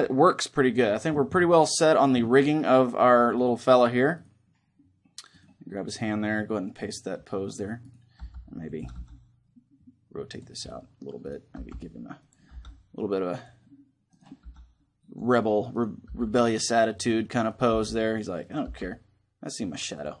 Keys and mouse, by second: 0.5 right click, 0.5 a, 1.7-3.4 drag, 2.1-3.1 middle drag, 3.1-6.7 right drag, 3.6 middle click, 6.4 click, 7.9 g, 8.4 right click, 8.6 r, 9.2-11.0 drag, 11.3 g, 12.0 right click, 12.3 r, 12.7-13.8 drag, 14.2 r, 15.8 g, 16.7 click, 17.5 g, 18.4 g, 19.4 right click, 20.0-20.2 drag.